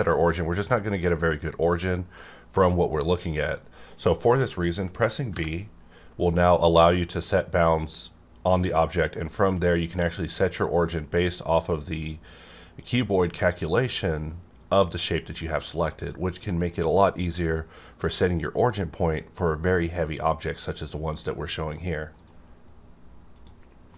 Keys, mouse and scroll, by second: 0.6-1.5 scroll down 1, 5.3 b, 22.2 right click, 22.2 right click, 23.4-23.9 middle drag.